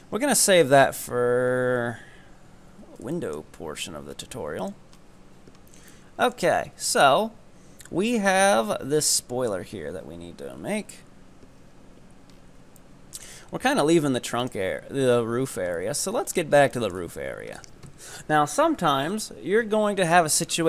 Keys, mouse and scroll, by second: 0.8-2.5 shift+middle drag, 2.5 scroll up 1, 2.8 Tab, 3.2 shift+middle click, 3.8 right click, 4.2-4.6 scroll up 3, 4.6 ctrl+right click, 5.1 scroll up 2, 5.1 z, 6.0-7.0 shift+middle drag, 7.0 KP_3, 12.3 scroll down 6, 12.8 shift+middle click, 13.5-14.4 scroll up 1, 14.4 right click, 15.8 shift+middle click, 16.3-16.8 scroll up 3, 16.8-19.7 shift+middle drag, 20.4-20.6 scroll up 1.